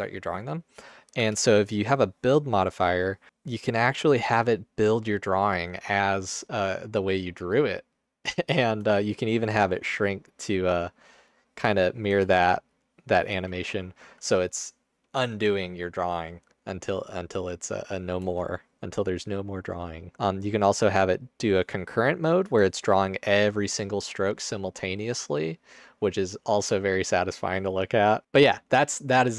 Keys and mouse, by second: 1.2 Tab, 3.3 space, 8.9 space, 10.8-11.5 drag, 11.7 space, 12.1 space, 12.8 click, 13.4 space, 18.2 space, 20.0 drag, 20.7-21.3 drag, 22.6 space, 27.5 space.